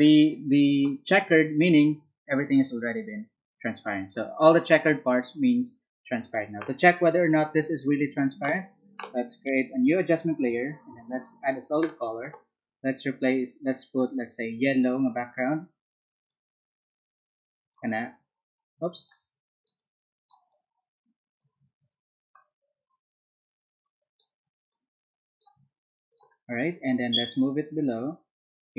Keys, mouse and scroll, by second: 9.7 click, 11.1 click, 14.1 click, 15.0 click, 16.2-17.8 drag, 19.0 click, 19.7 click, 20.5 click, 21.8-24.1 drag, 24.6 click, 26.0 click, 27.1 click.